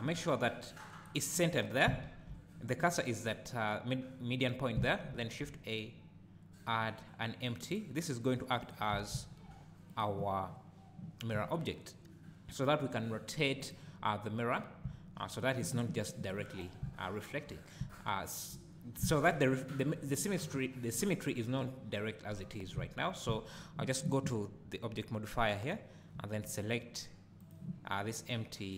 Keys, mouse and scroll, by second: 0.1 scroll up 1, 2.0 shift+a, 5.1 shift+a, 9.1 s, 10.0 click, 11.2 scroll down 1, 11.4 `, 13.6 click, 14.9 `, 27.4 click.